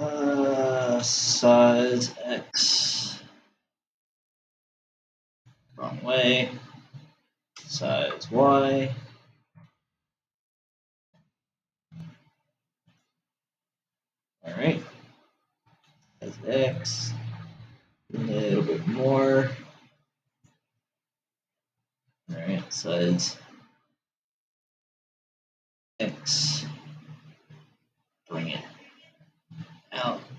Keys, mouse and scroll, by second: 8.1 s, 16.5 s, 22.9 s.